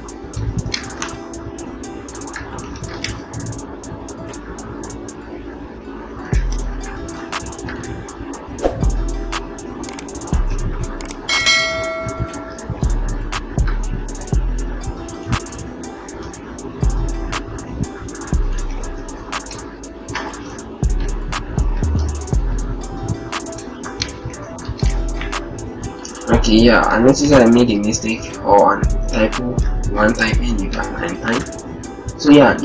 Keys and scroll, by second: 0.2 Return, 0.9 ctrl+a, 2.5 ctrl+d, 2.9 shift+Up, 5.4 Up, 5.6 Up, 6.0 Up, 6.6 Up, 12.1 ctrl+t, 24.1 ctrl+Return, 24.7 ctrl+a, 27.1 ctrl+d.